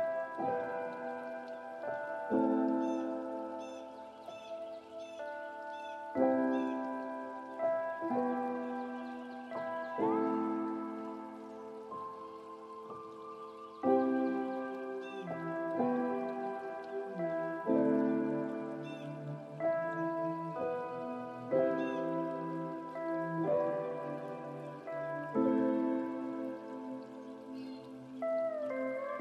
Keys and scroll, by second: 7.0 ctrl+space, 21.0 ctrl+space.